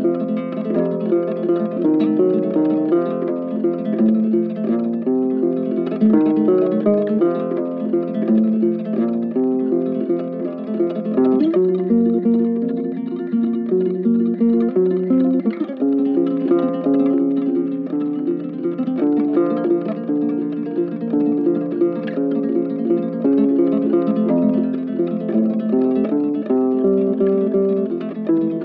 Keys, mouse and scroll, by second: 9.1 double click, 14.1 double click, 16.1 right click, 16.6 shift+click, 17.0 ctrl+z, 17.9 shift+click, 18.3 shift+click, 19.6 shift+click, 20.4 shift+click.